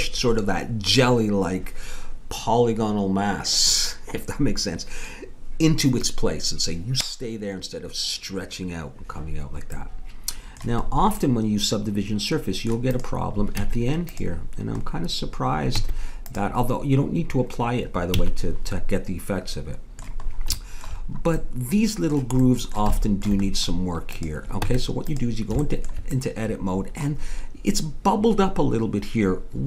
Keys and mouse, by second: 9.7-11.3 middle drag, 12.9 click, 13.6 Tab, 15.7 Tab, 18.2 a, 24.1-25.2 drag, 24.7 Tab.